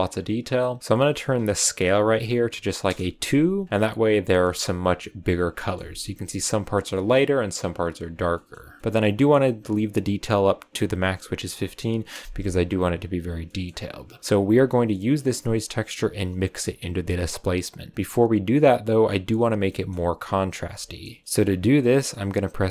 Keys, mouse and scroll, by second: 0.8-3.6 drag, 3.6 scroll down 5, 4.3-5.3 shift+middle drag, 5.3-6.1 scroll up 3, 5.5-5.8 shift+middle drag, 6.7 scroll up 1, 6.9-8.0 shift+middle drag, 8.0 scroll up 2, 8.3 middle click, 8.8-9.2 scroll up 1, 9.2-10.6 drag, 12.9 click, 13.2 scroll down 2, 13.4-14.1 middle drag, 14.1-14.8 scroll up 1, 14.9 click, 18.3 click, 19.6-19.9 shift+middle drag, 19.9 scroll down 1, 20.7-22.7 shift+middle drag.